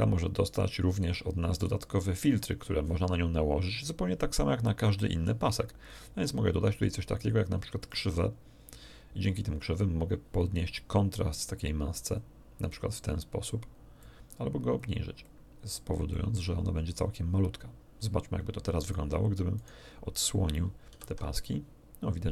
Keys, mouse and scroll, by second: 2.0-3.0 scroll up 1, 5.8 click, 7.8 click, 8.6 scroll down 1, 9.5 scroll down 1, 11.5 click, 13.0 click, 14.0 click, 15.2 click, 16.1 click, 18.8 right click, 19.5 shift+right click, 20.9 alt+shift+h.